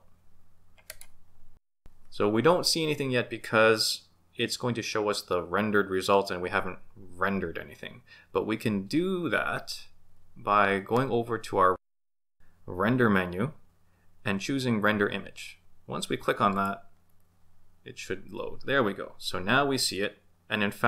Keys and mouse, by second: 1.3 Left, 12.2-16.9 drag.